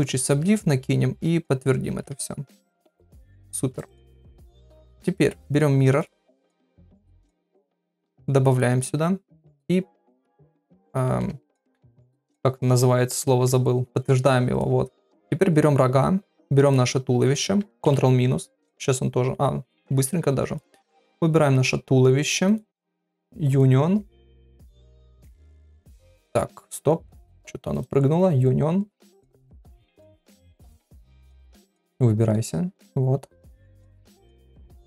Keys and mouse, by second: 1.9 ctrl+a, 3.7 right click, 6.0 click, 9.5 click, 10.4 middle click, 11.0 shift+middle click, 14.5 click, 15.0 middle click, 16.6 shift+click, 18.5 ctrl+KP_Subtract, 20.5 click, 22.5 click.